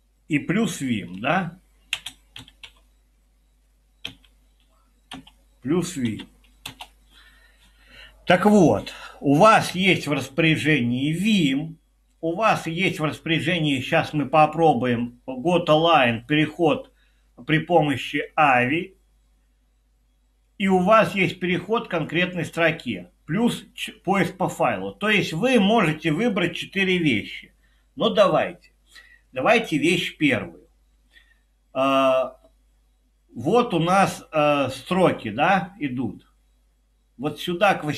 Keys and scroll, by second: 1.1-7.1 typing.